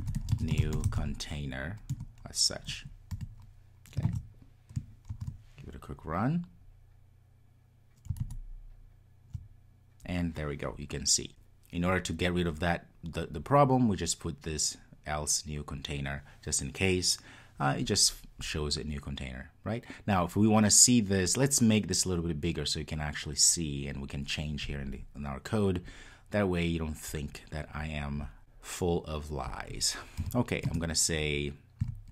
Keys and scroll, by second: 5.0 super+s, 5.2 ctrl+r.